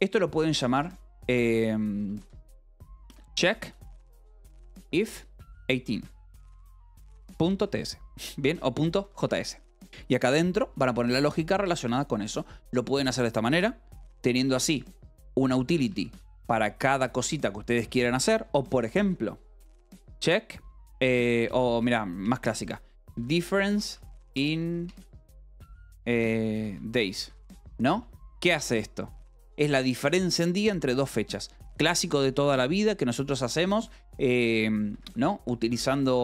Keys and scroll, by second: 0.6-3.7 typing, 1.2 Escape, 4.9-10.6 typing, 10.7 Escape, 14.6 o, 16.3 ctrl+g, 16.8 Escape, 17.7-20.4 typing, 21.4-24.8 typing, 25.8-28.4 typing, 29.6 Escape, 33.5 v, 34.1 e, 34.9 Escape, 35.2-36.2 typing.